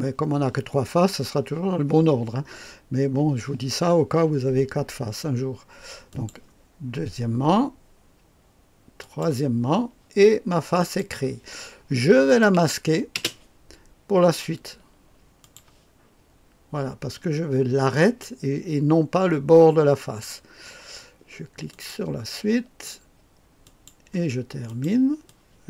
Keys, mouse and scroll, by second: 6.0 click, 8.9 click, 10.7 click, 11.1 click, 12.2 click, 13.1 space, 15.3 click, 17.8 click, 21.6 click, 23.5 click, 24.6 click, 25.2 click.